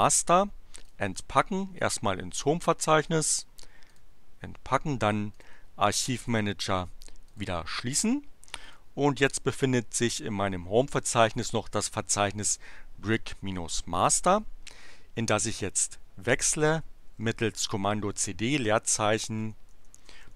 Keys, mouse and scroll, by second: 0.8 click, 1.7 click, 3.8 click, 5.3 click, 6.1 click, 7.2 click, 8.8 click, 16.8-18.0 typing, 19.2-20.3 typing.